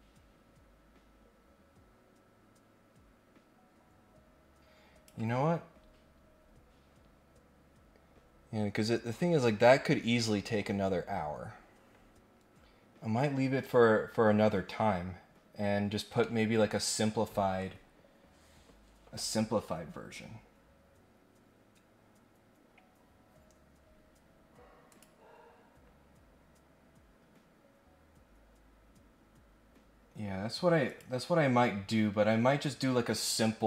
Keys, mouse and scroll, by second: 16.2 middle click, 24.9 click, 26.2 scroll up 1, 30.8 click.